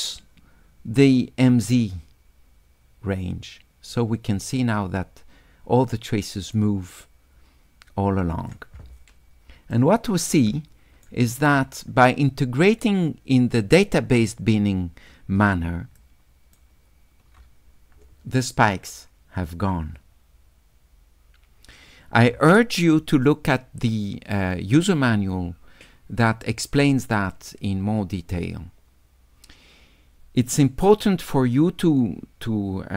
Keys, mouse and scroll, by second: 1.9-8.5 drag, 9.8-11.1 right drag, 16.0 shift+right click.